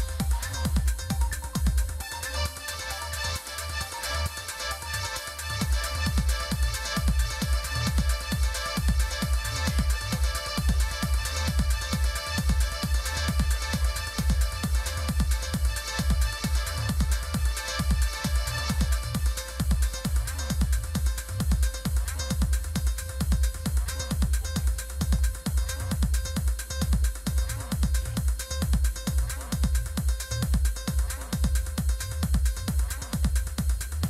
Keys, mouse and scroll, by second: 0.7 click, 3.9 click, 18.7 click, 25.0 click, 25.6 click.